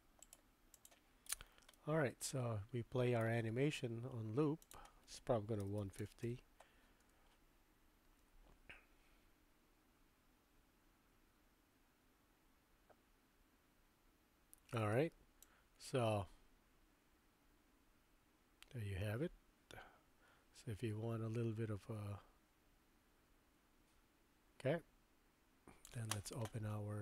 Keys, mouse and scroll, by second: 0.4 middle click, 1.7-3.2 middle drag, 4.8-6.6 drag, 7.0 space, 14.9 space, 15.4-25.8 drag.